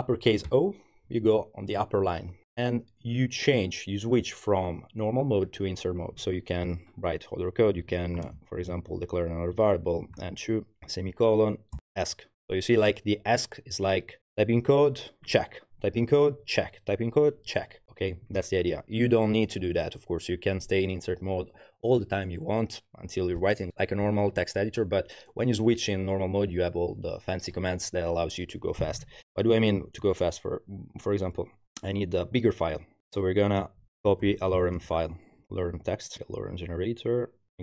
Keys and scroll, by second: 0.5 shift+o, 7.6-10.8 typing, 11.8 Escape, 33.8-35.6 typing, 35.6 Page_Down, 35.7 Return.